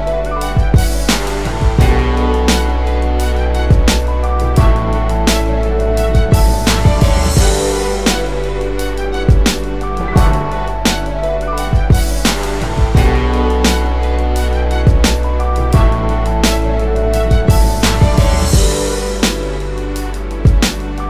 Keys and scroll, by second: 2.2 space, 9.0 space.